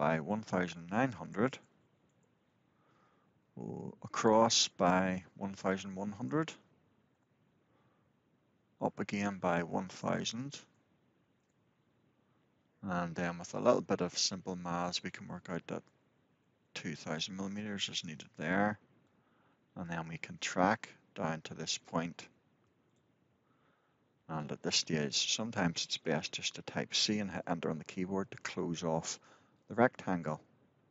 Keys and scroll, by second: 1.8 Return, 6.8 Return, 11.4 Return, 17.7 Return, 27.2 Return.